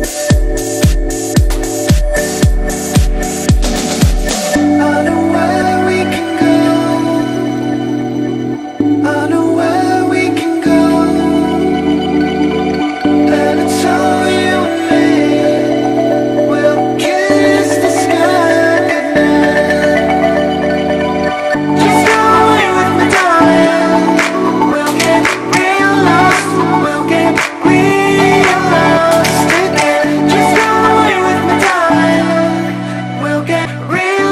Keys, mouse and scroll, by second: 0.2 Up, 0.9 click, 1.5 space, 1.7 click, 1.9-2.5 space, 4.1-13.0 drag, 14.2-15.3 drag, 16.9 ctrl+z, 17.4 click, 18.0 ctrl+=, 18.7 space, 18.9 click, 19.0 space, 19.3 ctrl+z, 21.3-21.8 drag, 25.6 ctrl+z, 26.2 click, 26.8 ], 27.7 BackSpace, 28.9 click, 32.7 click.